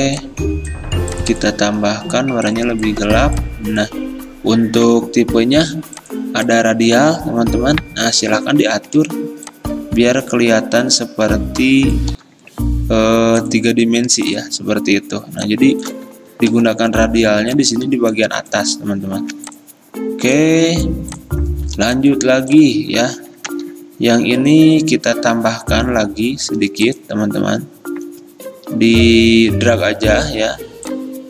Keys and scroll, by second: 9.0 g, 12.2 v, 16.6 g, 19.3 v, 21.9 r.